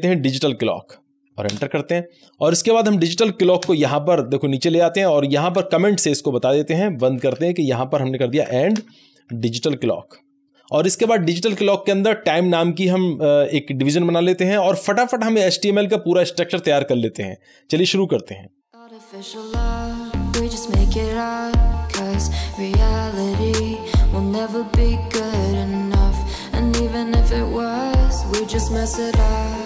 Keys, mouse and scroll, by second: 0.0-1.7 typing, 2.9 click, 3.6 Return, 4.8 Down, 5.5 Up, 5.8 Right, 7.2 alt+shift+a, 8.1-10.8 typing, 11.0 Up, 12.1-15.9 typing, 14.0 Down, 14.2 Right, 18.6 Tab, 18.6-23.7 typing, 20.9 Return, 21.1 Down, 21.2 Right, 23.4 click, 23.6 ctrl+scroll down 1, 24.2-24.8 scroll down 1, 24.8 click, 24.9-26.8 typing, 27.7 Down, 27.8 Right, 28.3 Return, 28.8-29.6 typing.